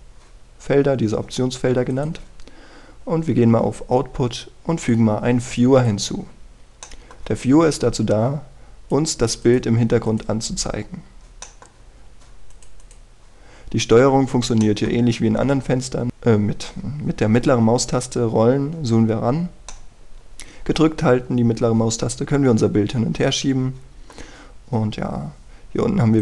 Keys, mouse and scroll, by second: 7.4-7.8 scroll down 1, 7.8 middle click, 8.8 click, 11.7 scroll up 1, 12.4 middle click, 12.8-13.5 scroll up 1, 13.5 click, 14.4-15.4 scroll down 1, 15.6 middle click, 16.1-18.5 scroll up 1, 18.5 scroll down 1, 18.8 scroll up 1, 19.1-19.9 scroll down 1, 19.9 scroll up 1, 20.1 scroll down 1, 20.3 scroll up 1, 20.7-25.2 middle drag, 25.3 scroll up 1.